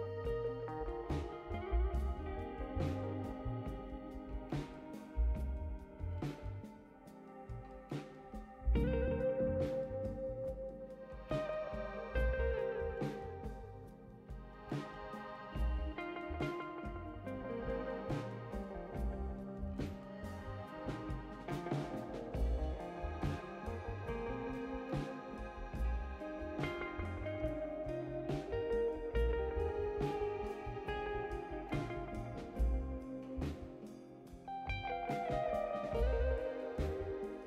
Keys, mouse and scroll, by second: 0.6 click, 0.9-2.0 drag, 2.5 click, 3.1-4.3 drag, 10.5 click, 12.4 click, 16.3 click, 16.7 space, 17.4 click, 18.3 space, 19.2 click, 22.4 click, 22.5 click, 24.2 5, 26.5 click, 30.8 click, 32.3 click, 33.6-35.0 typing.